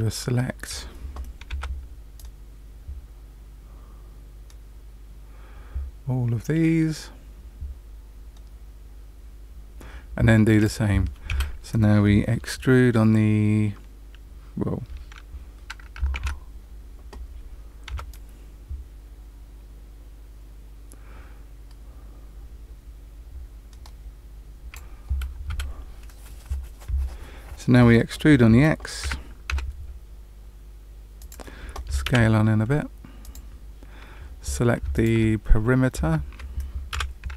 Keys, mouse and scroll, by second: 1.4 c, 16.1 alt+a, 17.8 c, 29.0 e, 32.0 s, 34.9 alt+click, 36.9 2.